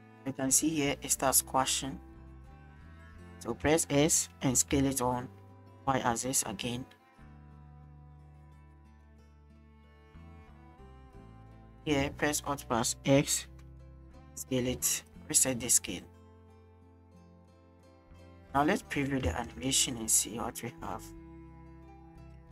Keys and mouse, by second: 3.6 s, 4.6 y, 7.4-11.8 drag, 13.7 alt+s, 15.1-18.8 drag, 19.3 space, 20.6 click, 21.7 shift+click.